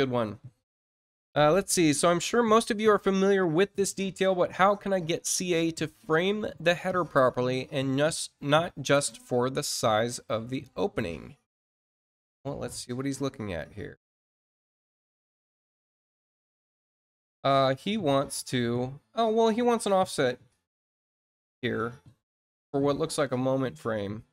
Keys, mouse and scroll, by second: 9.9 click, 13.4 click, 14.8 click.